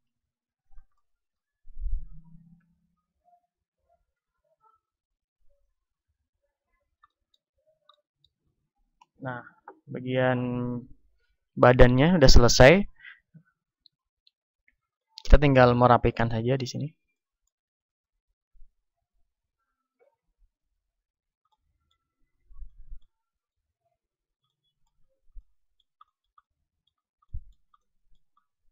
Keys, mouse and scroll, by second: 0.0 ctrl+Tab, 1.6-2.7 drag, 1.6-3.9 right drag, 2.7 KP_1, 3.9-5.1 middle drag, 3.9 e, 5.7-8.0 drag, 8.0-10.3 middle drag, 15.9 ctrl+Tab, 17.0 middle click, 18.3-22.7 drag, 18.3 middle click, 18.9-21.6 right drag, 21.6-24.3 middle drag, 23.3-25.7 drag, 24.3-25.7 right drag, 25.7-28.7 middle drag.